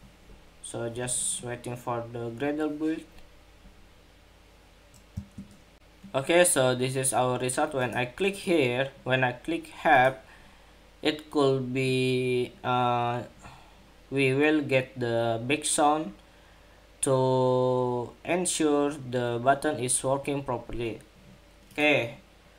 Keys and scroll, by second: 5.5 shift+super+2.